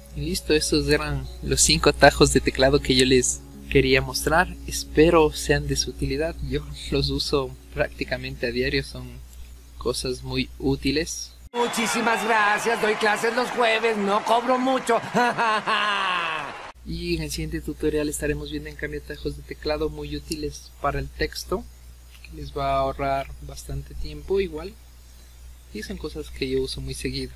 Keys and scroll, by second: 9.6-10.0 typing.